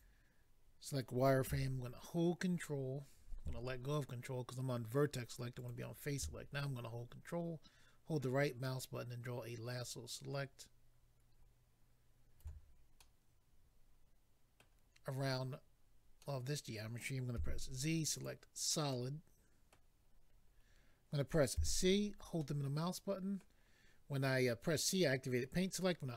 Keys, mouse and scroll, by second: 0.0 click, 5.5 click, 5.7 click, 7.2 ctrl+right click, 13.0 middle click, 16.2 middle click, 17.3 z, 18.1 click, 18.2 click, 18.9 middle click, 20.1-20.9 scroll up 3, 21.5 c, 22.4 middle click.